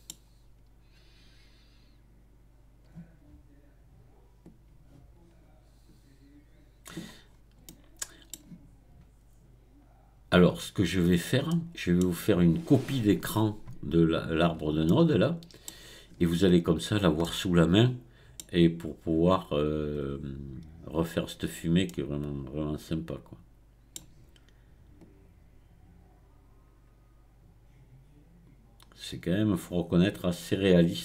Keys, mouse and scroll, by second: 0.2-1.2 scroll down 1, 1.2-3.2 scroll down 1, 4.4-7.2 drag, 7.2-7.7 scroll down 4, 7.7-10.7 middle drag, 11.0-11.5 scroll up 2, 11.5-14.1 middle drag, 14.1-14.9 scroll down 4, 14.9-16.7 middle drag, 16.7-17.2 scroll up 2, 17.2-20.2 middle drag, 21.9-24.9 middle drag, 25.0-28.0 drag, 30.4-31.0 scroll up 1.